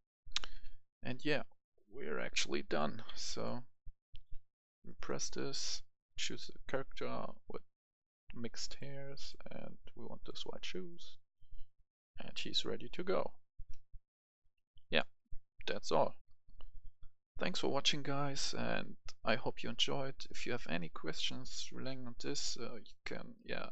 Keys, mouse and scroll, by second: 0.3-12.5 drag, 12.5 w, 13.0-13.5 w, 15.6 w, 16.1 click, 16.2 F10.